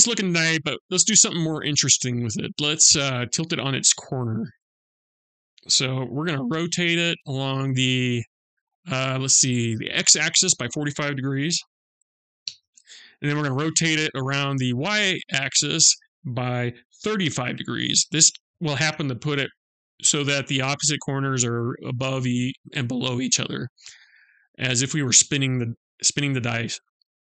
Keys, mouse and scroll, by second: 4.0 click, 6.2 r, 13.0 r, 23.4-23.8 scroll up 2, 27.2-27.3 scroll up 1, 27.2 g.